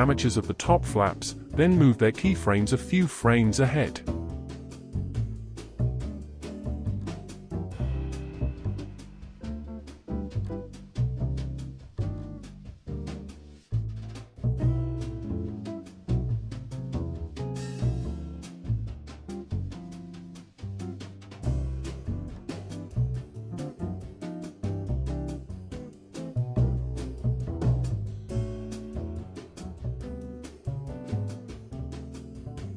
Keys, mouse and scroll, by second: 0.2-1.5 scroll up 1, 1.7 click, 3.4 shift+click, 5.7-8.7 drag, 13.6-14.1 drag, 14.1 space, 16.0 space, 16.9-19.9 drag, 21.8-24.9 drag, 27.1-28.7 drag, 28.7 space, 31.3 space.